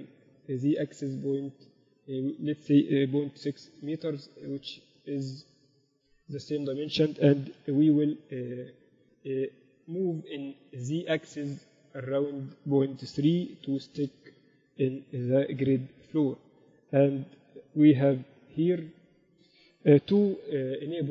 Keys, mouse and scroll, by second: 3.7 n, 7.7 g, 17.5 KP_8, 17.7 KP_8, 18.7 KP_7, 20.7 ctrl+alt+u.